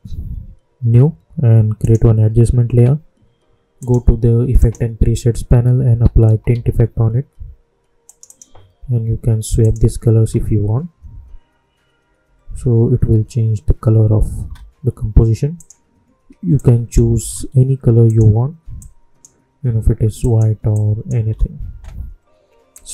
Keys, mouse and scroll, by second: 1.7 click, 5.8 t, 7.0 typing, 8.0 click, 10.1 space, 14.3 space, 15.5 click, 17.1 Return, 18.0-20.1 drag, 21.2 Return, 22.7 click.